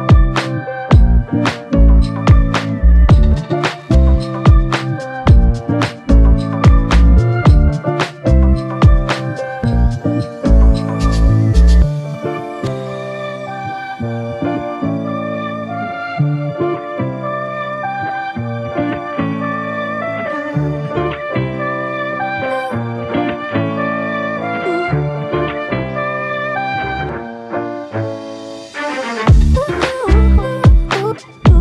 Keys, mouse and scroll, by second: 1.5 shift+click, 5.4 double click, 7.2 shift+click, 11.8 shift+click, 19.0 double click, 20.2 shift+click, 23.8 alt+click, 25.4 alt+click.